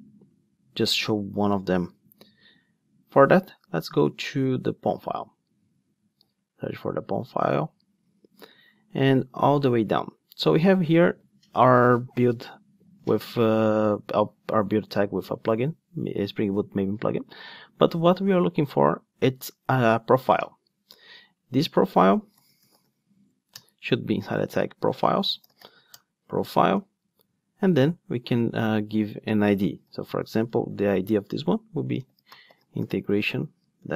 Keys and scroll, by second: 21.6 Tab, 23.6 Return.